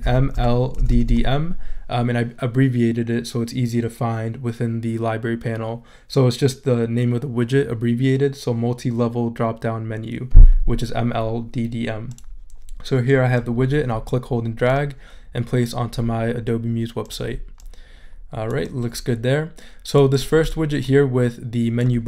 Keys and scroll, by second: 0.0-1.6 typing.